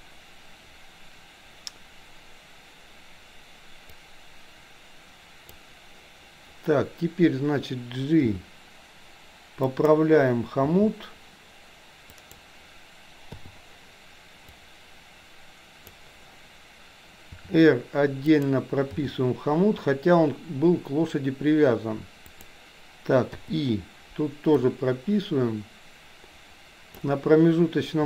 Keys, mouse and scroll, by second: 4.1-5.8 drag, 8.4 g, 10.8 g, 13.4 i, 14.6-16.0 drag, 17.4 r, 18.9 g, 23.5 i, 24.6-27.1 drag.